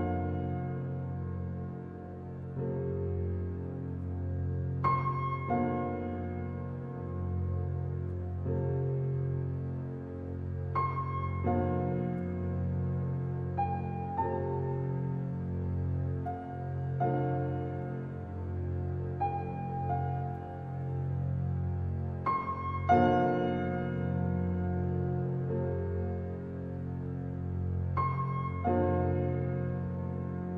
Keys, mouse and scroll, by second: 4.8 click, 5.4-7.6 middle drag, 7.6 g, 9.3-10.6 middle drag, 10.6 f, 11.2-12.6 middle drag, 12.6 i, 14.7 middle click, 15.3 ctrl+r, 18.7 s, 24.4 ctrl+r, 29.9 ctrl+r.